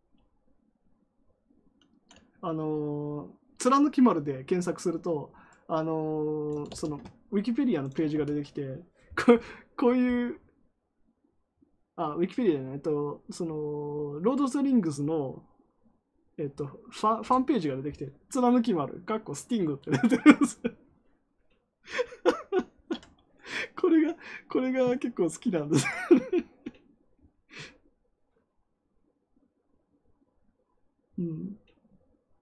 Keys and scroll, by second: 6.6 ctrl+c, 8.0 ctrl+v, 17.1 Return.